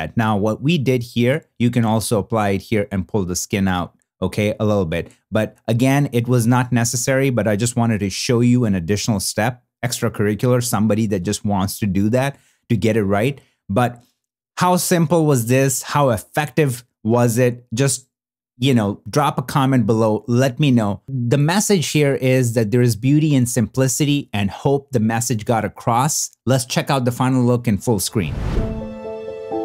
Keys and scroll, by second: 14.4 shift+f.